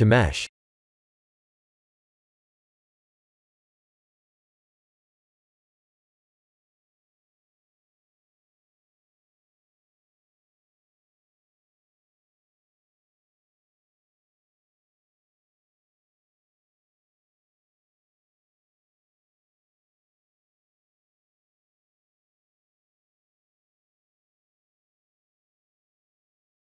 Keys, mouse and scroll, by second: 1.8 Tab, 2.7 Tab, 3.7 right click, 6.1 middle click, 6.7-8.0 scroll down 9, 8.0 click, 9.3 ctrl+z, 9.5 ctrl+z, 10.1 ctrl+z, 10.7 scroll up 3, 10.9 Tab, 11.3 middle click, 12.0-12.4 scroll up 5, 12.7 Tab, 14.9 click, 15.8 Tab, 16.3 Tab, 17.3 a, 18.6 v, 21.6 Tab, 22.1 middle click, 22.8-23.2 scroll down 12, 24.1 click, 25.2 KP_1.